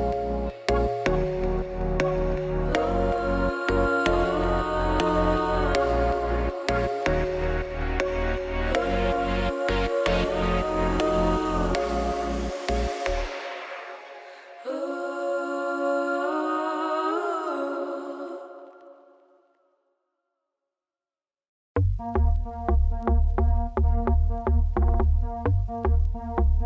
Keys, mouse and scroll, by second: 0.0 f, 0.2 click, 0.3 f, 0.4 f, 1.0 ctrl+z, 1.7 2, 1.8 click, 1.9 ctrl+g, 2.4 ctrl+f, 2.8 ctrl+f, 3.1 click, 3.4 click, 3.5 ctrl+f, 3.8 click, 4.0 click, 4.3 f, 4.5 middle click, 4.6 f, 5.0 f, 5.1 middle click, 5.4 Tab, 5.7 ctrl+2, 6.0 middle click, 6.3 scroll up 1, 6.5 shift+middle click, 6.8 ctrl+1, 7.5 right click, 7.8 middle click, 8.0 Tab, 8.5 middle click, 8.7 ctrl+r, 11.8 middle click, 12.2 ctrl+r, 12.6 3, 12.7 click, 12.9 shift+click, 13.0 middle click, 13.2 g, 14.8 alt+click, 15.0-16.1 middle drag, 16.1 g, 17.1-18.1 middle drag, 18.1 a, 19.3 s, 20.9 middle click, 21.4 Tab, 21.5 scroll down 5, 21.6 middle click, 22.0 scroll up 4, 22.2 middle click, 22.5 Tab, 22.7 2, 22.9 alt+click, 23.2 click, 23.3 middle click, 23.6 shift+click, 23.8 middle click, 23.9 g, 24.5 click, 24.6 g, 25.9 Tab, 26.6 click.